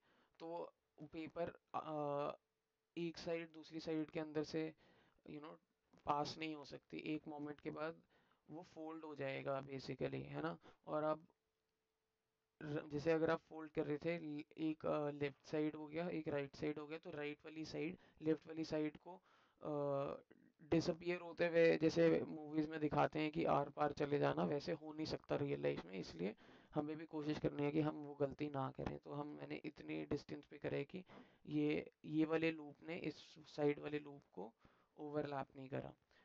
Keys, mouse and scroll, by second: 26.7-27.9 alt+drag, 28.6 alt+click.